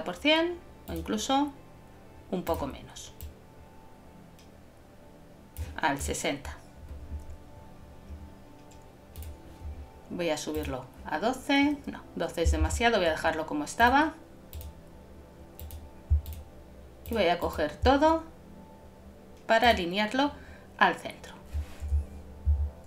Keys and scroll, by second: 12.6 super+z.